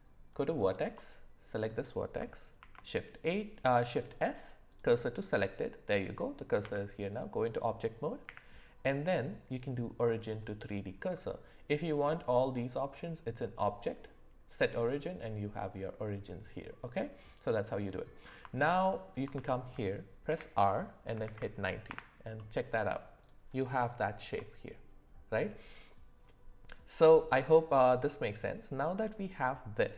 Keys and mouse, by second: 0.5 click, 1.5 click, 2.6 shift+s, 6.6 Tab, 8.2 q, 12.6-17.0 drag, 17.5 click, 19.5 shift+middle click, 20.3 r, 22.3-22.9 middle drag, 23.8-24.2 shift+middle drag.